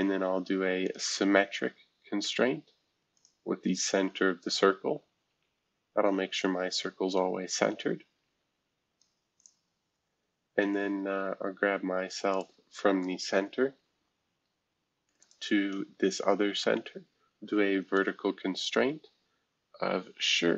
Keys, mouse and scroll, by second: 0.0-0.8 typing, 3.1 click, 4.4 click, 5.3 Escape, 6.4-9.0 drag, 9.4 click, 12.3 click, 12.8-13.3 scroll down 2, 14.0 scroll up 1, 15.2 shift+click, 16.0-16.7 scroll down 2, 16.7 scroll up 2, 20.0 typing.